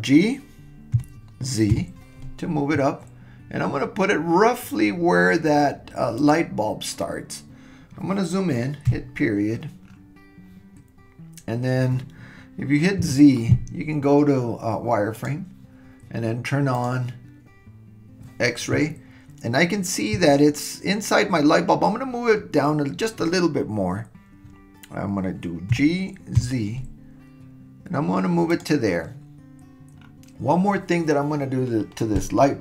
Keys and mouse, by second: 1.0 g, 8.9 KP_Decimal, 13.0 z, 16.8 click, 25.7 g.